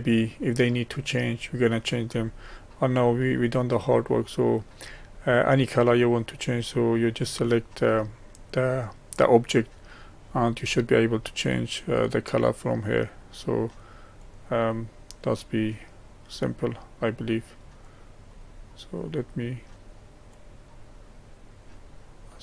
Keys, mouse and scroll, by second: 3.0 click, 7.2 click, 14.4 click, 15.2 click, 20.3 click.